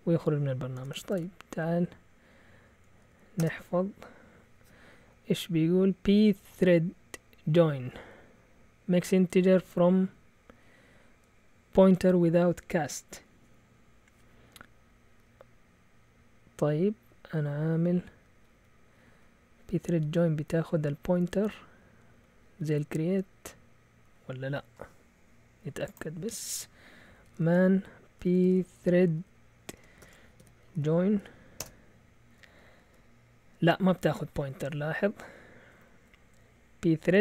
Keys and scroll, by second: 0.7-1.5 typing, 3.4 Return, 15.2 Up, 17.1-23.7 typing, 26.8-32.1 typing.